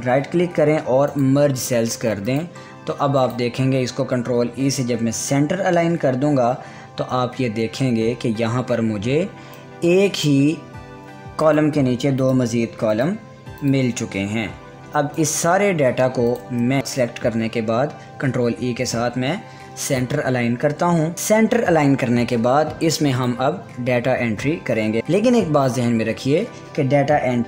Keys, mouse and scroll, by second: 0.3 right click, 1.7 click, 4.3 click, 5.0 ctrl+e, 10.1-16.8 drag, 16.8 ctrl+e, 21.1-23.7 drag, 25.0 ctrl+z.